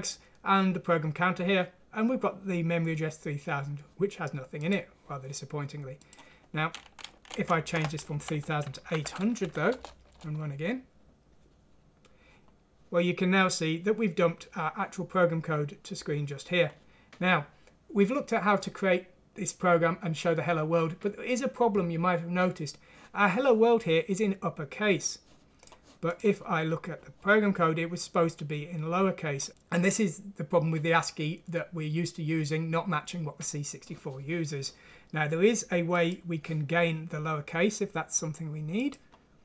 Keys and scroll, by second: 7.0 Left, 7.4 Down, 8.2 Right, 8.9 8, 9.4 F6, 9.8 Return.